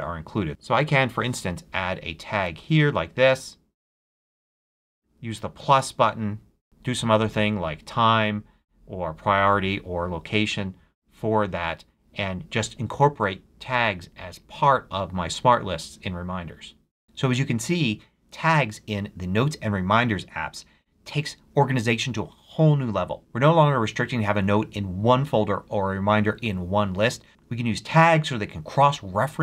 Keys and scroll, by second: 0.5 shift+BackSpace, 0.8 shift+a, 1.6 a.